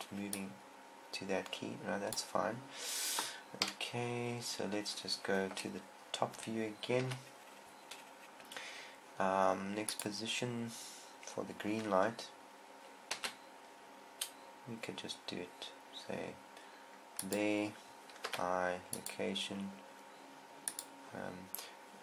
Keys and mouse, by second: 0.8 right click, 4.1 KP_7, 5.9 KP_7, 7.4 KP_7, 10.4-11.8 drag, 13.6 r, 17.8 click, 18.7 i, 21.1-22.0 drag.